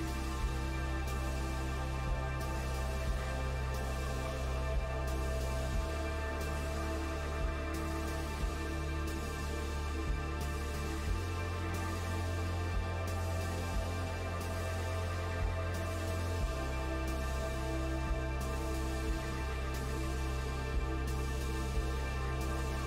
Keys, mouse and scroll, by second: 2.2 g, 5.1 g, 8.6 s, 12.2-12.6 scroll down 1, 12.6-14.6 middle drag, 14.6 Tab, 15.0-15.4 scroll down 1, 15.4 middle click, 16.2-16.9 scroll up 1, 16.9 scroll up 1, 17.1-19.4 right drag, 19.4 click, 19.8-21.2 middle drag, 21.2 click, 21.6 Tab.